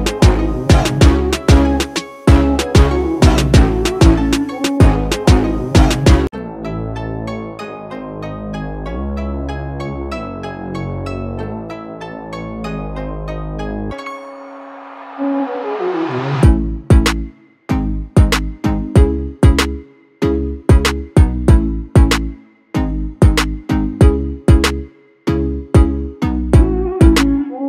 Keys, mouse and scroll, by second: 0.1-0.5 alt+scroll down 1, 0.5 space, 0.6 click, 1.0 space, 3.9-8.4 drag, 10.7 ctrl+z, 11.7-15.4 shift+drag, 16.5 shift+click, 18.8 space, 19.0 click, 19.3 space, 19.9 click, 24.8-27.6 drag.